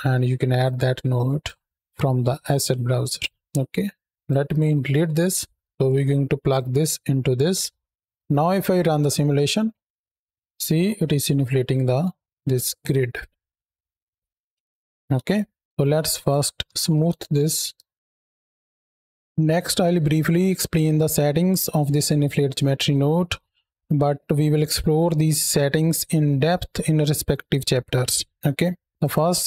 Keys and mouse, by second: 0.5 click, 2.4 click, 3.6-4.0 middle drag, 4.1 drag, 4.6 x, 6.4-8.0 drag, 9.3 space, 10.6-11.2 drag, 11.9-13.9 drag, 14.2 space, 15.0 KP_7, 15.6 shift+Left, 15.7 shift+a, 19.1-20.3 drag, 28.9 click.